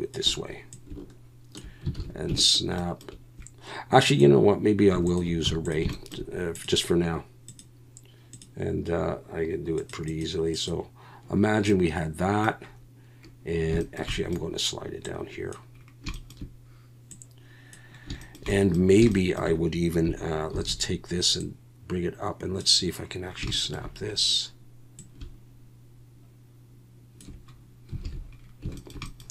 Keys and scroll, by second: 2.0 alt+a, 5.4 x, 20.5 shift+d, 28.0 alt+a.